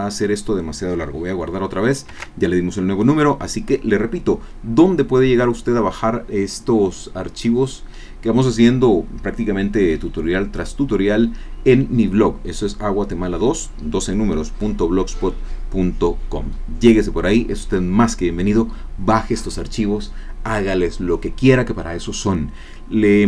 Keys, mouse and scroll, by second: 2.1 ctrl+s.